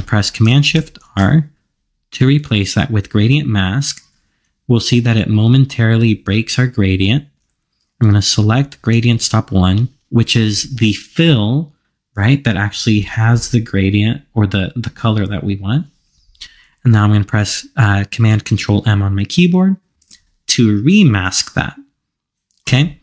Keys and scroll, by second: 1.0 shift+super+r, 19.9 ctrl+super+m.